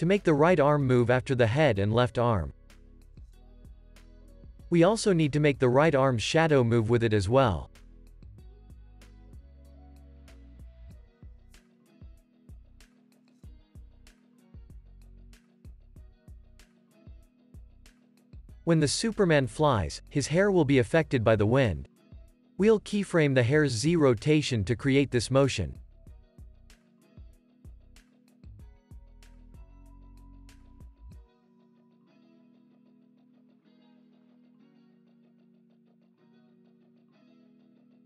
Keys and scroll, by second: 2.2 space, 3.1 x, 5.0 super+c, 7.2 super+v, 7.8 super+s, 11.0 space, 17.1 space, 17.4 super+s, 22.5 Right, 24.2 Right, 25.2 Right, 26.0 Right, 27.0 Right, 27.7 Right, 28.5 Right, 29.6 Right, 30.6 Right, 32.1 Right, 32.6 Right, 33.9 Right, 34.7 Right, 35.6 Right, 36.9 Left, 37.9 Right.